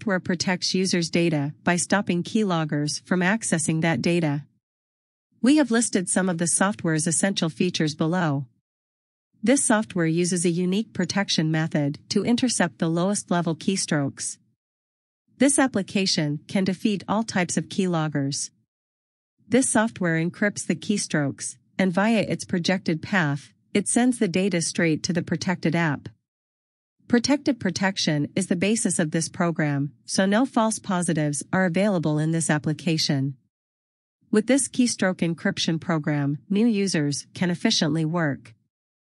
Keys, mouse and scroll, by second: 2.2 click, 3.3 scroll down 1, 5.6 click, 21.1 scroll down 1, 25.7 scroll down 1, 30.2 scroll down 1, 32.1 scroll up 1.